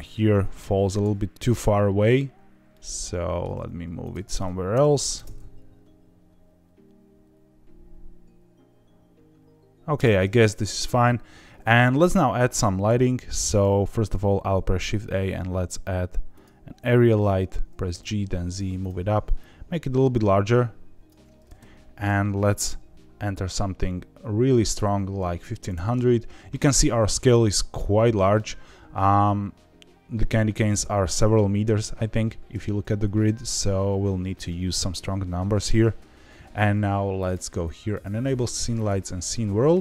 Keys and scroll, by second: 3.5 g, 4.6 KP_0, 5.1 space, 9.9 space, 14.5 shift+a, 17.8 g, 25.7 KP_0.